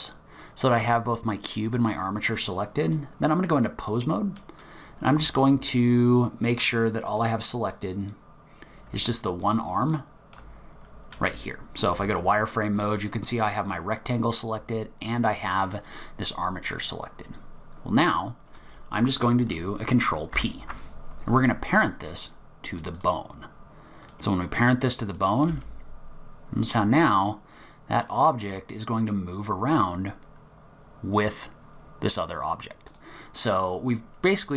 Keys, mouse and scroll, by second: 2.8 click, 7.1 click, 7.7 click, 9.3 shift+click, 9.8 click, 11.3 z, 12.7 scroll up 2, 17.1 scroll down 2, 18.1 scroll up 1, 20.3 ctrl+p, 24.0 click, 24.4-25.1 scroll down 1, 25.1 click, 25.1 scroll down 3, 25.5 g.